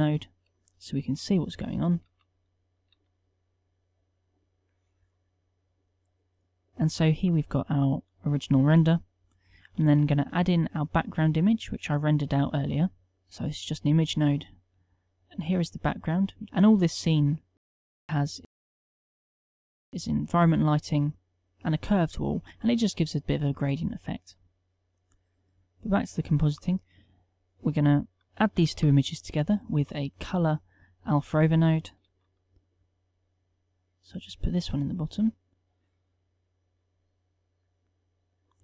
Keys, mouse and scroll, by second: 19.1-20.5 drag, 21.4-23.2 middle drag, 23.7 click.